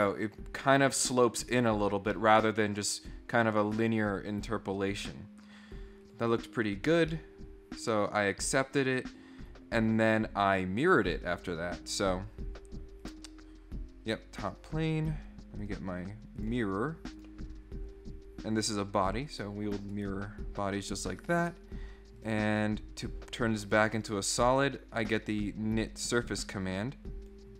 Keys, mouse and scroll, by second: 1.9 scroll up 1, 2.1 middle click, 6.0 click, 7.1-8.5 middle drag, 11.0 click, 13.0 click, 15.6 click, 16.3 click, 17.1 click, 18.5 click, 19.2 click, 19.9 right click, 22.1 click, 23.0 click, 23.6 click, 23.9 click, 24.4 click, 24.9 click, 26.0 click, 26.5 middle click, 27.2 click.